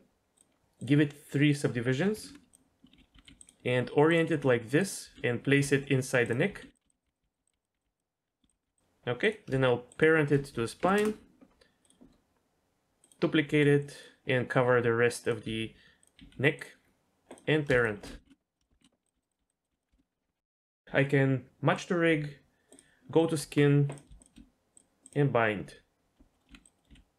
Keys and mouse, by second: 0.4 click, 0.9-2.5 drag, 3.1-5.1 typing, 6.5-8.7 typing, 9.3 click, 10.0 shift+click, 10.8 ctrl+p, 11.9-13.3 drag, 13.5 g, 14.8 r, 15.5 s, 16.2 g, 18.2 ctrl+p, 18.8 ctrl+p, 19.1 s, 19.4 s, 19.7 s, 19.9 shift+middle click, 21.8 click, 22.7 click, 23.4 Tab, 24.0 click, 24.2 shift+click, 24.8 click, 26.3 middle drag, 26.5 Tab, 26.8 middle click, 26.9 g.